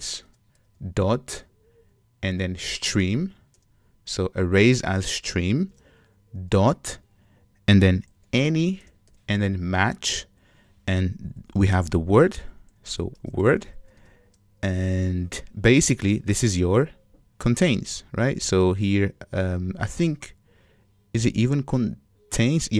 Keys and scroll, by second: 0.3 Return, 9.9 Return.